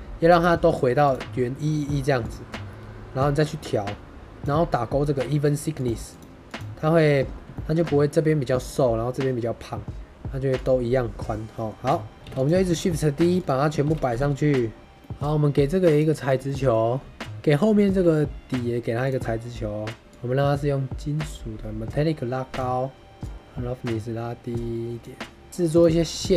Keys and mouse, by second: 0.6 click, 3.2-4.4 shift+drag, 5.7 click, 6.0 click, 6.4 click, 7.5 shift+middle drag, 10.4 click, 11.4 middle click, 12.1 middle click, 12.1-12.6 typing, 12.3 click, 13.2 click, 13.7 shift+d, 14.0 g, 14.1 x, 14.9 middle drag, 15.8 click, 16.2 shift+middle drag, 16.3 middle drag, 17.1 shift+middle drag, 17.7 shift+middle drag, 20.0-22.6 drag, 23.3-25.0 drag, 25.5 shift+a, 25.9 middle click, 26.1 g.